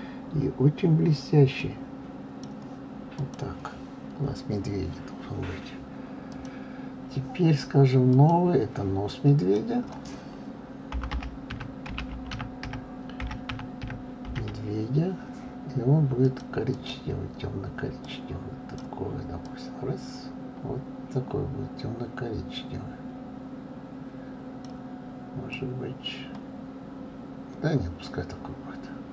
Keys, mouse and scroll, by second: 1.6-3.3 drag, 6.3 click, 8.1-12.4 drag, 16.7 click.